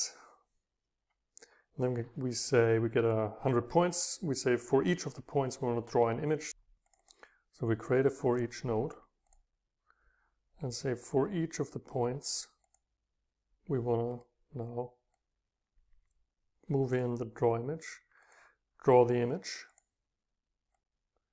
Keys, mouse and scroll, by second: 0.0-1.4 scroll up 2, 1.4-2.0 middle drag, 7.0-9.1 drag, 9.3-11.3 drag, 12.7-14.1 drag, 14.1-15.2 right drag, 15.2 Left, 15.2-16.0 drag, 15.6 Right, 16.0 space, 17.0-21.3 drag.